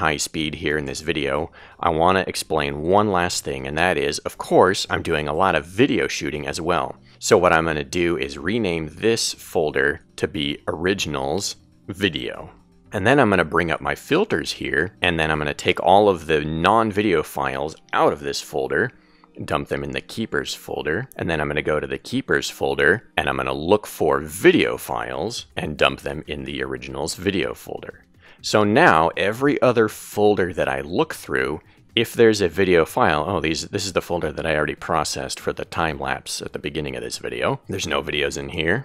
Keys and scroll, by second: 7.9-10.8 typing, 11.2 Return, 19.2 super+a, 26.8 super+a.